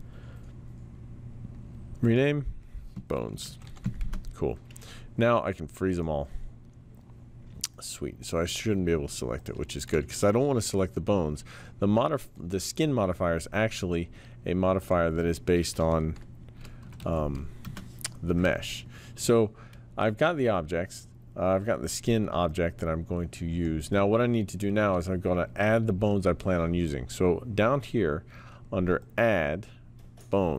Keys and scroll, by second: 3.1-4.3 typing, 16.2-17.8 typing, 22.5 typing.